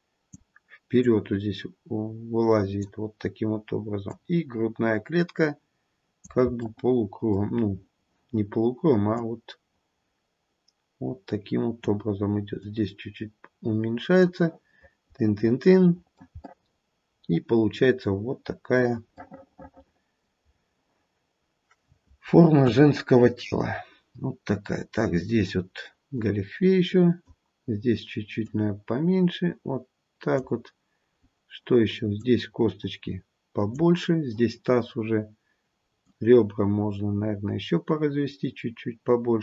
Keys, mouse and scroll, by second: 1.0 click, 6.5 click, 6.5-7.1 scroll down 1, 7.1 middle click, 7.4 middle click, 7.4-8.4 scroll up 3, 9.1 click, 12.6 click, 16.4 middle click, 17.7 middle click, 19.1 middle click, 19.2 middle click, 20.5-21.2 scroll down 2, 21.2-22.3 scroll down 1, 22.5 KP_1, 24.6-25.7 scroll up 1, 26.2 click, 28.4 click, 31.2-32.2 scroll up 4, 32.2 click, 36.1 click.